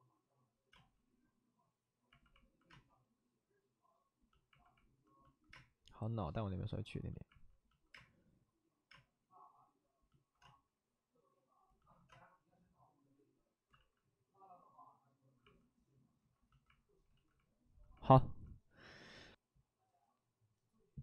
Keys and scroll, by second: 2.4 space, 2.6 space, 5.5 space, 7.9 space, 8.8 space, 10.4 space, 12.0 space, 13.7 ctrl+z, 16.1 ctrl+z, 17.0 ctrl+z.